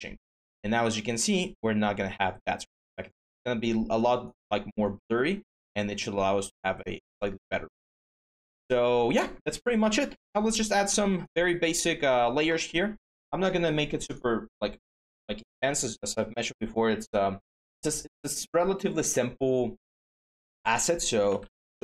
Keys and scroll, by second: 14.8 BackSpace, 20.8-21.8 typing.